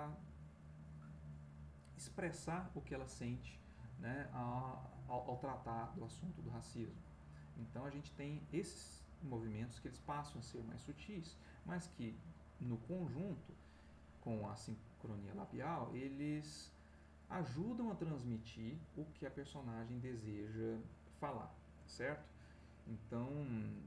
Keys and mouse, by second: 13.3-14.4 ctrl+middle drag, 15.9-23.8 drag.